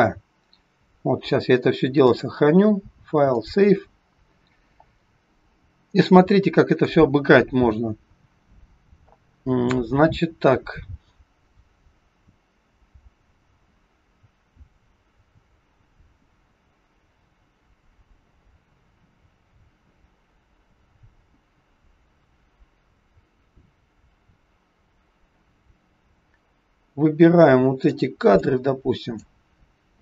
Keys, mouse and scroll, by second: 2.0 click, 6.7 click, 28.4 click.